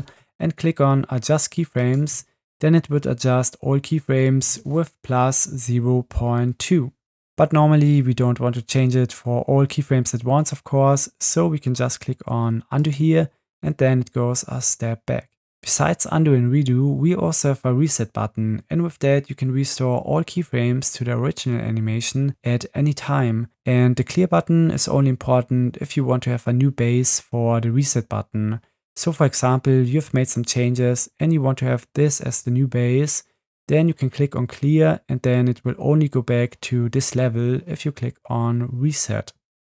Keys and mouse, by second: 1.7 click, 12.8-18.7 drag.